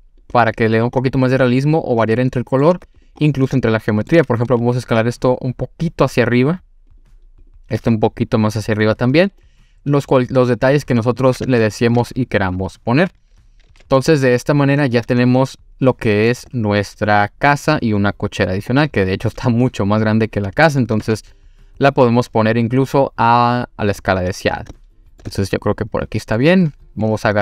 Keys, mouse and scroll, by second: 0.4 click, 1.0-2.7 middle drag, 2.7 3, 3.0 click, 3.2 scroll up 2, 3.6-4.1 shift+middle drag, 4.6 e, 6.9 click, 7.4 click, 7.8 e, 8.7 click, 9.2-10.4 scroll down 2, 9.4-11.2 middle drag, 11.5 Tab, 12.4 click, 13.6 g, 13.7 x, 14.7 click, 15.0-16.3 middle drag, 19.1 scroll down 1, 19.4-20.8 middle drag, 21.0 s, 24.0 click, 24.4 scroll up 2, 24.8-25.2 shift+middle drag, 25.3-26.4 middle drag.